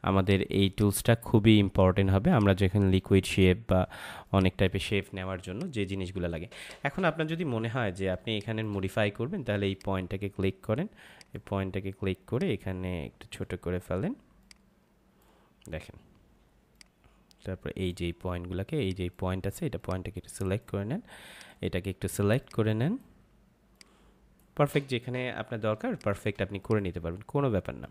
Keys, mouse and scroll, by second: 0.5 space, 0.6 click, 1.0 space, 2.2 click, 5.1 space, 5.4 click, 5.6 space, 6.6 click, 7.7 ctrl+=, 8.1 space, 8.3 click, 8.6 space, 9.6 click, 25.3 ctrl+=, 25.8 space, 25.9 click, 26.2 space, 26.6 click.